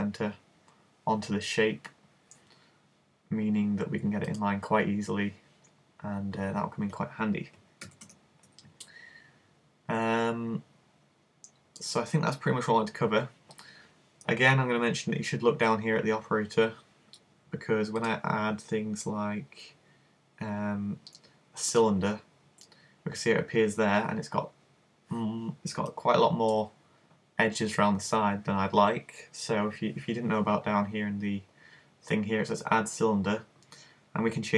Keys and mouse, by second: 4.4 click, 7.9 super+z, 8.1 super+z, 18.1 click, 26.0 middle click.